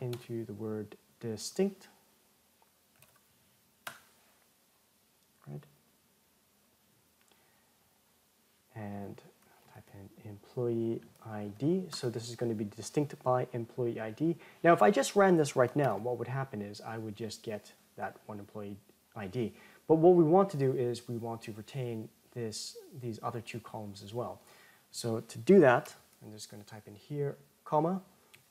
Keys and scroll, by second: 12.0 Tab, 15.6 ctrl+Return.